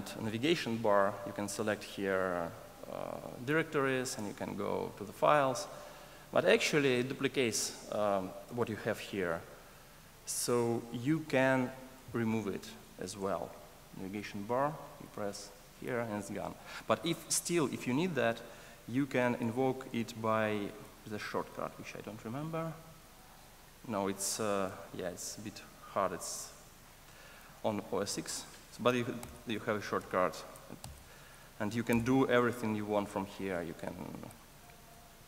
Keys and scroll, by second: 20.9 ctrl+alt+shift+Left, 23.0 alt+shift+Left, 23.7 super+Up, 29.1 super+Up.